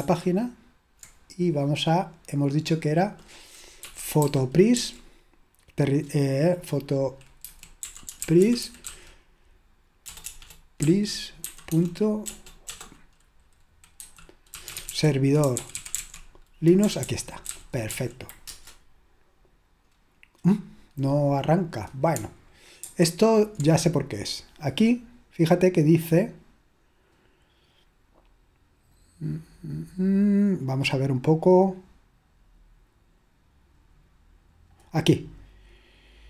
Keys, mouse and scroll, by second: 0.0 super+8, 2.4 click, 3.7-5.2 typing, 7.2-12.7 typing, 13.8-16.5 typing, 16.8 Down, 17.0 Down, 17.4 Down, 17.6 Up, 17.9 Up, 18.1-18.5 typing, 19.6-20.4 typing, 23.0 super+7.